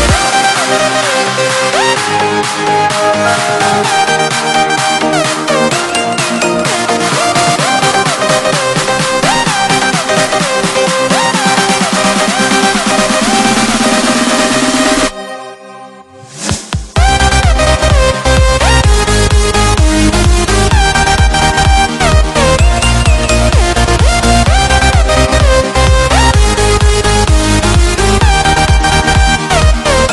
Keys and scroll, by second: 17.6 alt+BackSpace.